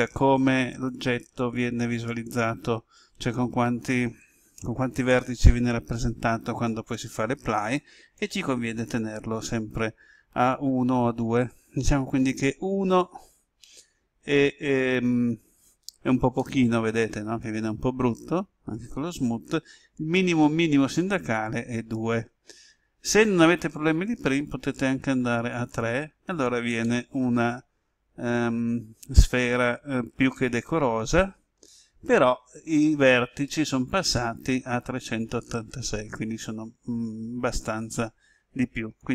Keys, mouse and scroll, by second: 0.7 click, 16.3-19.5 middle drag, 20.9 click, 26.8-31.5 middle drag, 39.0 click.